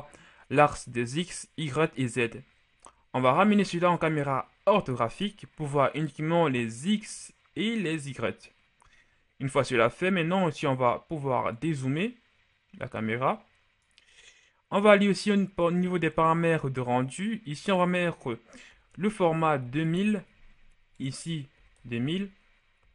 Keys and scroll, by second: 18.6-19.6 typing, 19.7 Return, 21.4-21.7 typing.